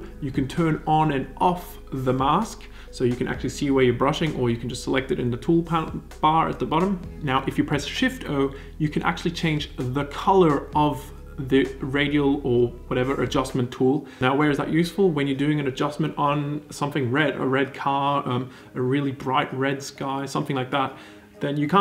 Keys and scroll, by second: 0.4 o, 7.2 o, 8.7 shift+o, 9.9 shift+o, 11.2 shift+o.